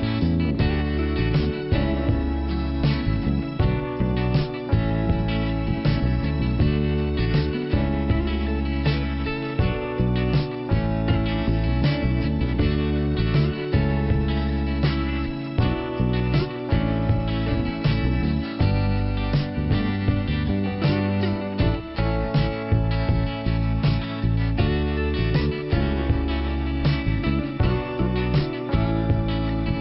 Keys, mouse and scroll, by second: 1.0 click, 1.1 click, 1.4 ,, 2.5 click, 5.0 click, 8.4 shift+Return, 9.3 click, 10.8 click, 12.8 click, 14.8 click, 15.9 click, 17.9 click, 19.7 click, 21.0 click, 23.8 click, 25.5 click, 28.6 click, 29.2 click.